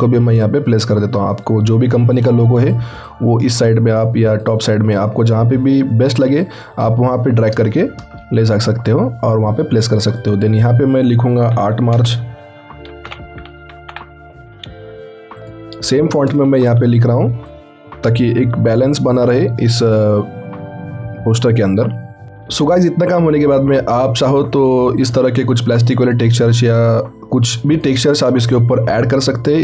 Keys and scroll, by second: 11.6-14.4 typing, 16.6 ctrl+t, 28.8 ctrl+t.